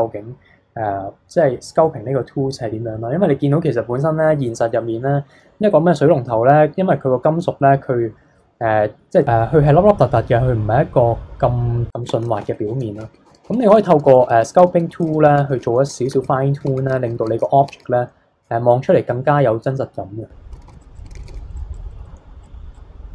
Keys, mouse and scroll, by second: 2.9-3.9 scroll up 1, 3.9-4.8 scroll up 1, 11.9 ctrl+z, 12.0 ctrl+z, 12.4 ctrl+z, 12.6 ctrl+z, 13.0 ctrl+z, 13.2-14.2 ctrl+z, 14.6 ctrl+z, 14.8 ctrl+z, 15.1 ctrl+z, 15.3 ctrl+z, 15.6 ctrl+z, 15.9 ctrl+z, 16.1 ctrl+z, 16.6 ctrl+z, 16.9 ctrl+z, 17.2 ctrl+z, 17.6 ctrl+z, 18.0-20.5 middle drag, 20.5 ctrl+z, 20.7 ctrl+z, 20.8 click, 21.0 ctrl+z, 21.1 ctrl+z, 21.2 ctrl+z, 21.3 ctrl+z, 21.5 drag, 21.8 scroll down 2, 21.9-22.4 middle drag, 22.4 click.